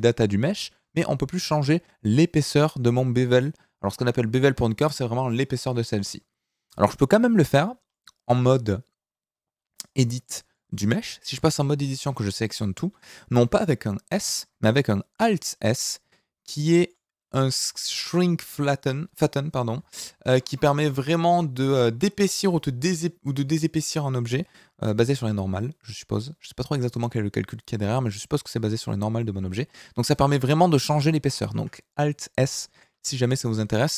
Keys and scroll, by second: 11.3 Tab, 11.9 a, 13.3 s, 14.1 Escape, 15.1 alt+s, 20.0 ctrl+z, 25.0 alt+s, 31.5 Escape, 32.4 Tab.